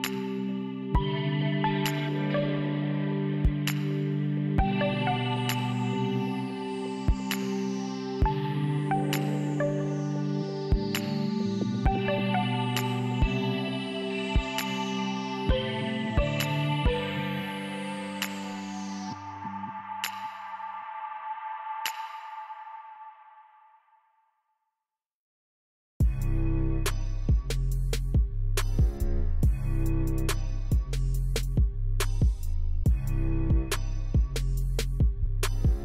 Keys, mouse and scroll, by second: 16.3-17.0 typing, 17.4 Return, 19.0 typing, 20.8 typing, 22.4 typing.